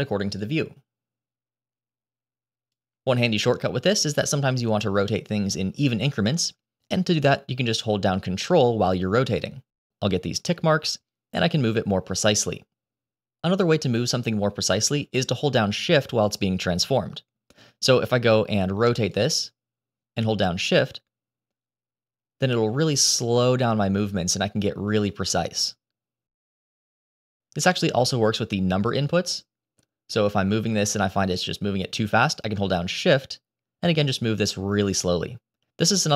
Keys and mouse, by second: 0.3 click, 0.5-2.6 drag, 5.1-13.4 drag, 19.1-27.8 drag, 30.1-36.1 drag.